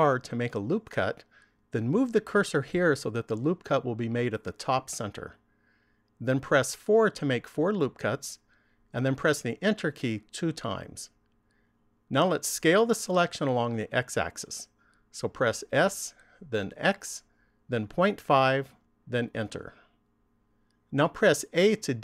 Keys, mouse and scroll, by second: 15.1 s.